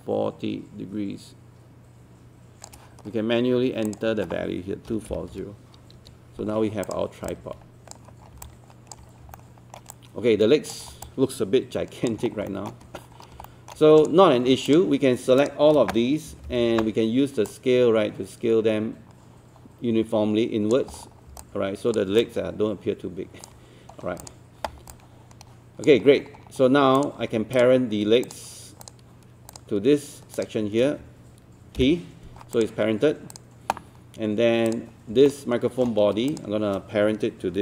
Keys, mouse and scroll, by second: 3.9 click, 4.9 KP_2, 6.9 click, 8.3 scroll down 1, 8.5 alt+click, 9.1 scroll up 1, 9.4 alt+middle click, 9.9 alt+click, 11.1 alt+click, 12.3 scroll up 1, 12.5 alt+middle click, 13.0 scroll up 1, 13.5 alt+middle click, 14.0 click, 14.7 shift+click, 15.4 shift+click, 16.3 shift+e, 17.5-20.9 drag, 20.9-21.3 scroll down 1, 21.4 alt+click, 22.2-23.5 alt+drag, 23.9 scroll up 1, 24.2 click, 24.9 alt+click, 26.1-27.0 scroll down 1, 27.0 click, 27.6 shift+click, 28.3 shift+click, 28.8 shift+click, 29.5 shift+click, 30.4 shift+click, 31.8 shift+p, 32.5 click, 35.3 alt+middle click, 36.3 shift+click.